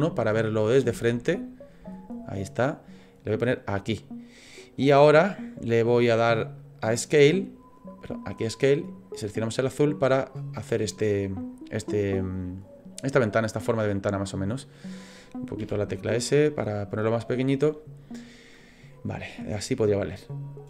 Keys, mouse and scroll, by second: 0.3-0.7 scroll up 8, 1.1 shift+middle click, 1.9 scroll up 1, 2.4 scroll down 1, 3.0 click, 6.6 click, 13.1 click, 15.6 s, 16.9 click, 18.9 middle click.